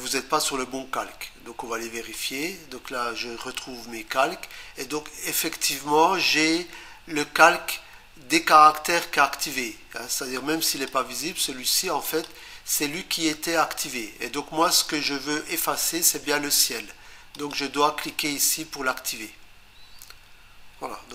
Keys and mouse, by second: 2.2 click, 10.7 click, 12.1 click, 17.4 click, 18.1 click.